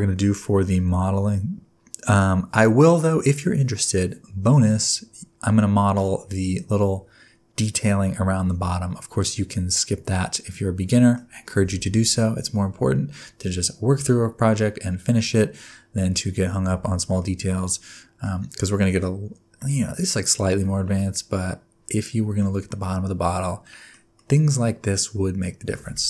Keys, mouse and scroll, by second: 2.2-2.8 scroll down 5, 3.0-3.8 scroll up 4, 3.8-5.0 scroll up 2, 5.2-5.5 scroll down 3, 5.5 middle click, 6.1-6.9 scroll up 3, 9.7 middle click, 14.1-14.7 scroll down 2, 14.7-15.2 scroll up 3, 15.5-16.1 scroll down 1, 16.1-17.1 scroll up 1, 17.1 middle click, 18.5 middle click, 20.9 middle click, 22.8 middle click, 24.1 middle click.